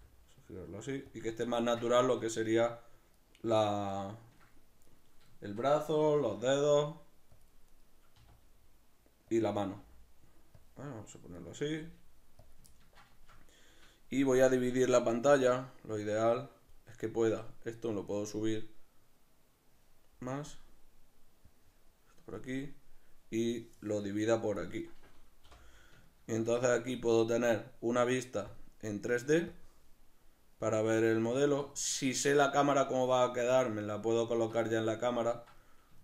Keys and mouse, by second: 1.2 click, 1.5-3.2 ctrl+middle drag, 3.2 right click, 4.0 ctrl+middle click, 4.9 right click, 5.4-7.4 shift+middle drag, 6.0 g, 7.4 click, 7.8 right click, 8.2 r, 9.4 click, 9.8 g, 10.6 click, 11.4 right click, 11.8 g, 12.5 click, 12.8-15.4 ctrl+middle drag, 15.4-25.0 drag, 25.0-28.5 middle drag, 25.4 t, 28.5-30.0 drag, 30.0-36.0 middle drag.